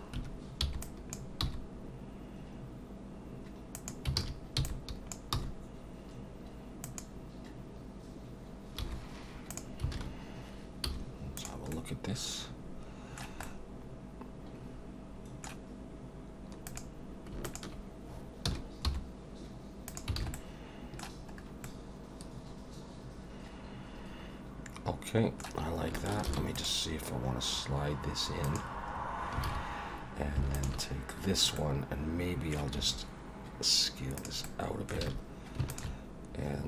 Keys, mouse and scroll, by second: 0.2 1, 0.6 b, 1.4 g, 4.2 alt+a, 5.3 b, 5.3 g, 8.8 g, 9.9 alt+a, 10.8 z, 11.7 middle click, 13.4 middle click, 16.7 click, 17.4 shift+click, 18.5 s, 20.2 alt+a, 20.3 middle click, 21.4 scroll up 1, 21.6 middle click, 26.3 ctrl+r, 28.9 scroll up 3, 29.4 alt+a, 30.5 alt+shift+click, 31.5 middle click, 32.8 s, 34.4 middle click, 35.0 alt+a, 35.7 alt+shift+click.